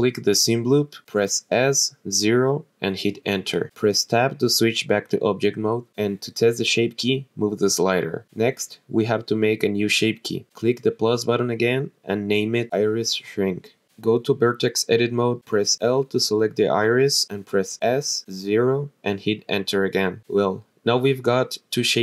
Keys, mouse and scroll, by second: 1.2 s, 1.9 KP_0, 2.9 Return, 3.9 Tab, 4.7-6.4 scroll down 1, 6.9 click, 8.6 click, 10.2 click, 11.1 click, 14.5 Tab, 15.9 click, 16.2 l, 17.4 s, 17.8 KP_0, 19.0 Return, 20.6 ctrl+z.